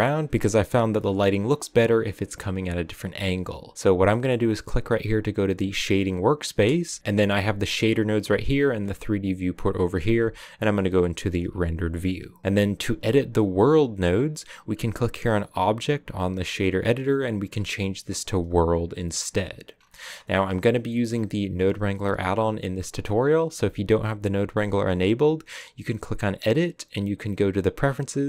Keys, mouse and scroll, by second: 5.7 click, 6.6 KP_0, 8.3-9.0 scroll up 1, 11.4 z, 20.6 click.